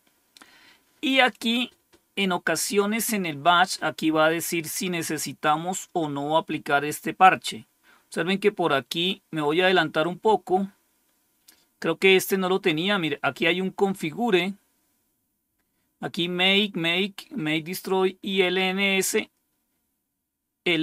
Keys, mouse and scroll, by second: 8.3-8.8 scroll down 1, 10.2-10.6 scroll down 1, 14.8-16.1 scroll down 2, 18.1-18.9 scroll down 2, 19.6 scroll down 1.